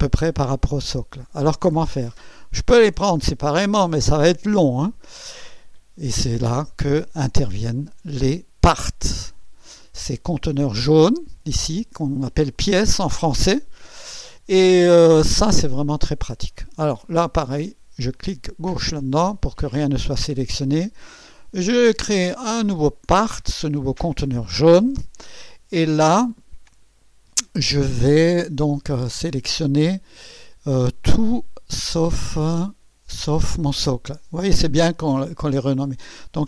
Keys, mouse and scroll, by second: 18.1 click, 22.4 click, 28.5 click.